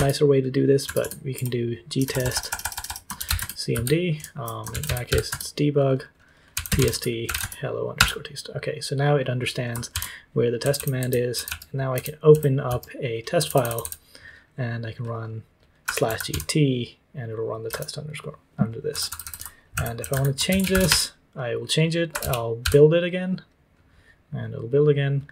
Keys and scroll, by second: 0.0-7.7 typing, 7.9 Return, 9.9 ctrl+t, 10.3-23.1 typing.